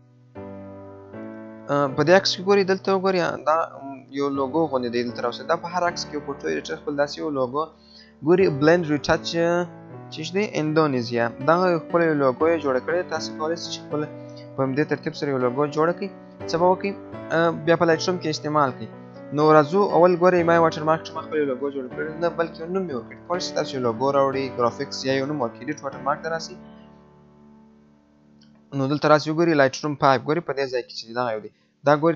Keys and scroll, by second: 14.9 alt+F4.